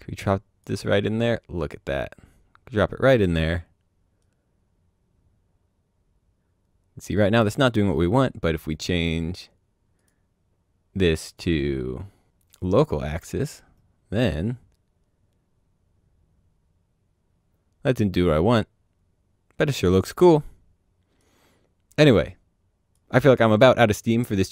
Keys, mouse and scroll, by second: 4.1 right click, 9.9 right click, 11.2 click, 12.2 click, 14.4 right click, 22.0 click, 23.5 Delete, 24.0 click.